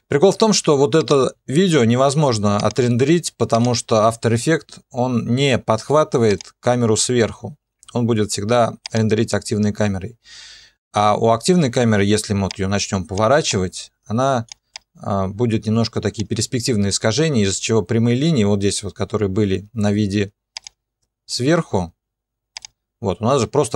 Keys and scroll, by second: 1.6 ctrl+a.